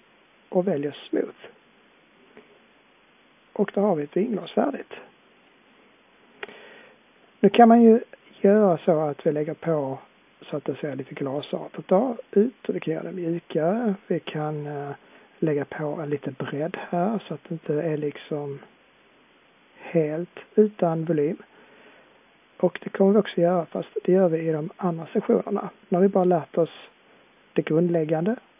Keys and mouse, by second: 2.6-3.4 drag, 3.9-4.3 middle drag, 6.1-7.2 middle drag, 9.2-19.9 middle drag, 20.5-22.3 middle drag, 22.3-22.7 drag, 22.7-25.2 middle drag.